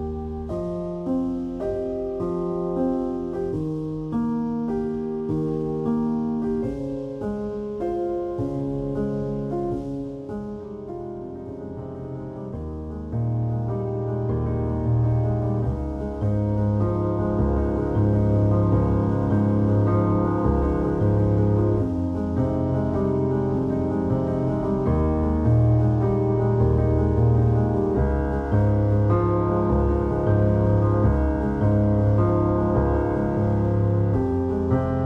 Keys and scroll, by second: 5.8 `, 5.8 s, 8.7 alt+shift+z, 17.5 Tab, 22.1 Tab, 23.9 0, 25.2 alt+shift+z, 26.2 Tab, 29.2 3, 31.2 shift+q, 34.8 3.